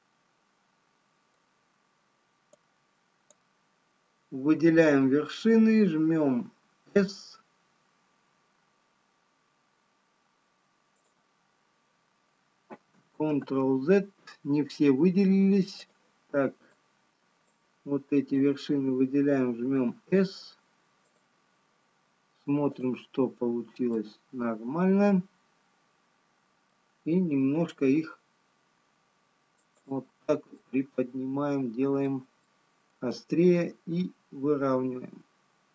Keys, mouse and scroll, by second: 4.9 click, 7.1 s, 13.4 ctrl+z, 16.3 click, 16.8 click, 18.0 click, 20.0 s, 23.3 click, 24.0 middle click, 28.3 g, 31.6 middle click.